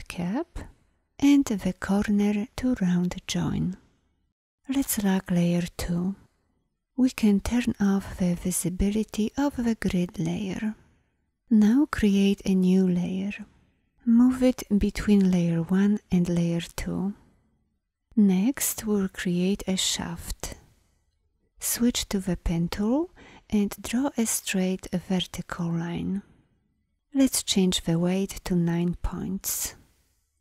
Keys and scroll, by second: 22.3 p.